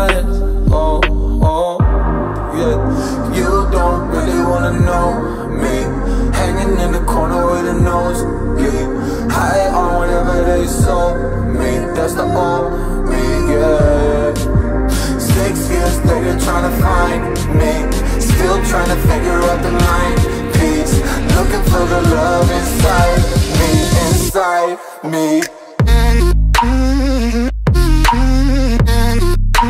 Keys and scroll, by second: 26.2 Down.